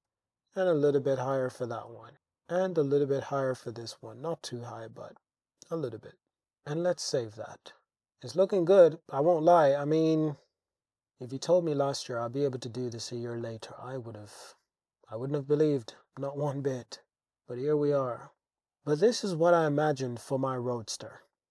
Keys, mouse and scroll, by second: 0.1 z, 1.5 shift+click, 3.2 click, 3.5 click, 4.4 Tab, 5.2-6.3 drag, 7.1 middle drag, 7.7 middle click, 7.9 middle click, 9.2 middle click, 9.6 middle click, 10.3-12.1 middle drag, 12.8 middle click, 13.4-13.8 middle drag, 15.6-16.5 middle drag, 18.0 middle click, 18.4 middle click, 19.7 Tab, 20.9 Tab, 21.4-21.5 drag.